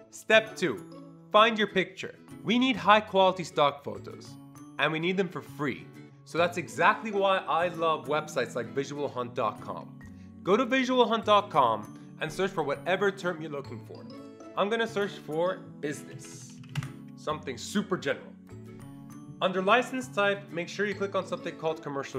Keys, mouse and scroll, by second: 14.9 click, 15.7-17.2 typing.